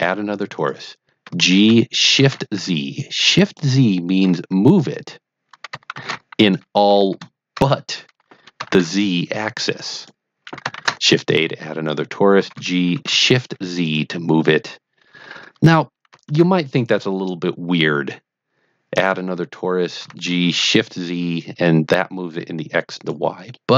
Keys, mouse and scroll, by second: 0.5 click, 1.2 g, 2.2 z, 3.4 click, 4.2 g, 5.9 shift+z, 6.3 click, 6.8 g, 8.6 shift+z, 9.9 click, 10.7 shift+a, 11.8 click, 12.3 g, 12.9 shift+z, 13.8 click, 16.2 shift+a, 18.9 click, 19.9 g, 20.5 shift+z, 23.0 click, 23.4-23.7 middle drag.